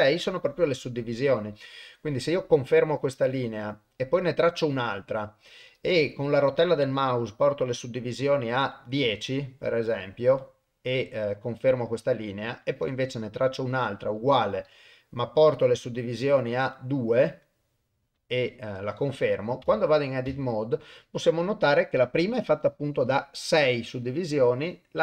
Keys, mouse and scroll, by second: 4.6-11.5 drag, 12.6-18.7 drag, 19.6 Tab, 20.3 a.